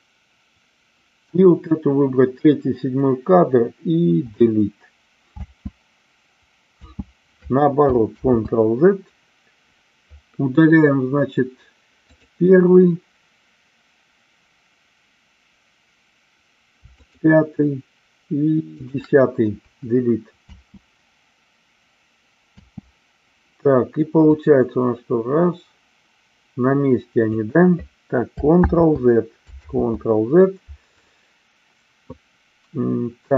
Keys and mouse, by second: 4.2 Delete, 5.5 space, 6.9 space, 8.1 ctrl+z, 12.1 click, 16.8 shift+click, 18.7 shift+click, 19.7 Delete, 20.4 space, 24.3-27.3 drag, 28.6 ctrl+z, 29.7 ctrl+z.